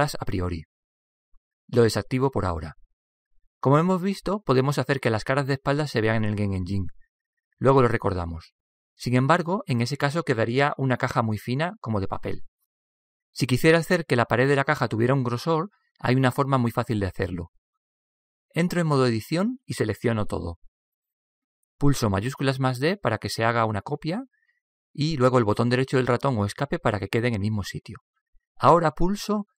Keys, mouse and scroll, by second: 2.8-4.7 drag, 3.9 middle click, 4.7-5.7 middle drag, 6.8-8.6 drag, 10.1-12.6 middle drag, 20.0 Tab, 20.9 a, 21.3 a, 21.7 a, 24.0 shift+d.